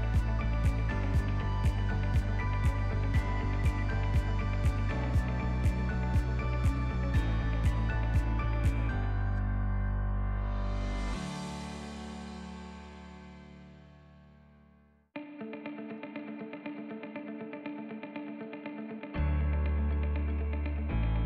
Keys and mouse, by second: 0.7 KP_Subtract, 1.1 ctrl+KP_Add, 1.3 ctrl+KP_Add, 2.3 s, 5.5 alt+click, 6.8 ctrl+KP_Add, 7.0 ctrl+KP_Add, 7.7 s, 10.9 click, 11.1 middle click, 11.6 ctrl+click, 12.0 click, 13.9 ctrl+KP_Add, 14.1 ctrl+KP_Add, 14.3 ctrl+KP_Add, 14.5 ctrl+KP_Add, 14.9 ctrl+KP_Add, 15.4 ctrl+KP_Add, 15.9 ctrl+KP_Subtract, 16.9 s, 19.3 Tab, 19.7 ctrl+middle click, 20.3 middle drag, 20.9 Tab, 21.1 ctrl+middle click.